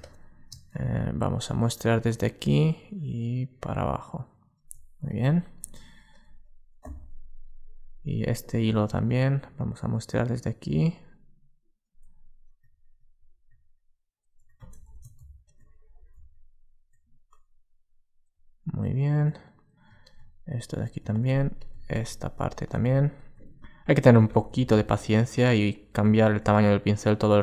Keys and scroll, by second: 14.6 alt+super+z, 24.3 alt+super+z.